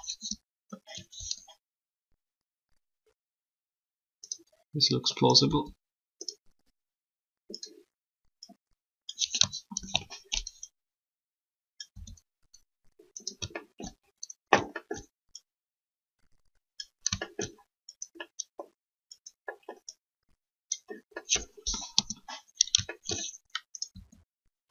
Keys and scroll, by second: 0.0 3, 5.4 r, 9.8 ctrl+z, 11.9 r, 21.9 3, 23.9 alt+r.